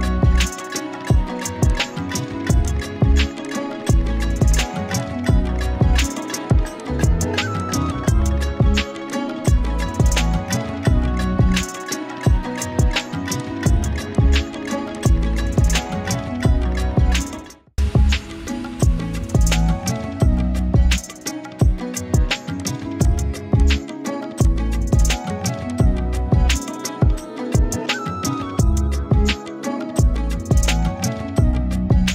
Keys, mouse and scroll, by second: 0.8 alt+shift+z, 1.6-6.3 alt+drag, 6.4 click, 6.7 space, 6.8 click, 8.4 right click, 9.1 click, 10.0-11.8 alt+drag, 16.8-17.7 shift+drag, 22.2-26.0 typing, 22.6 click, 23.6 click, 24.4 click, 25.0 click, 25.2 click, 25.7 click, 26.1 click, 29.3 click.